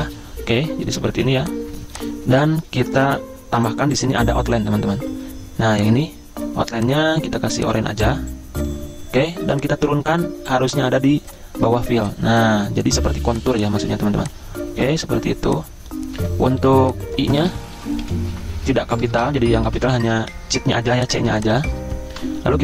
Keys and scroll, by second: 1.7 ctrl+s, 1.7 alt+Tab, 16.6 t, 17.7 i, 19.1-19.8 typing, 19.2 Caps_Lock, 20.2 Escape, 20.9 z, 22.1 v.